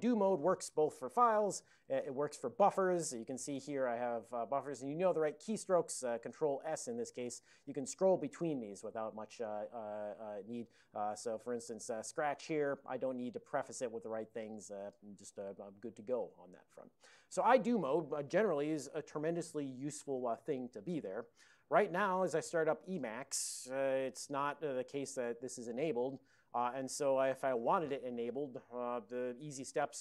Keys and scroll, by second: 1.4 ctrl+g, 1.8 ctrl+x, 2.0 b, 6.7 ctrl+s, 7.2 ctrl+s, 7.7 ctrl+s, 8.3 ctrl+s, 11.0-11.7 typing.